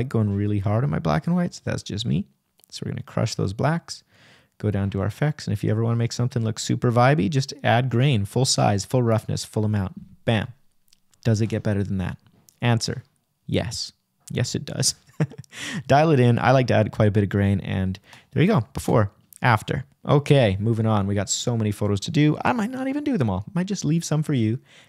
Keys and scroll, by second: 10.6 \, 12.6 Right, 21.8 shift+=, 22.3 shift+-, 23.0 shift+\.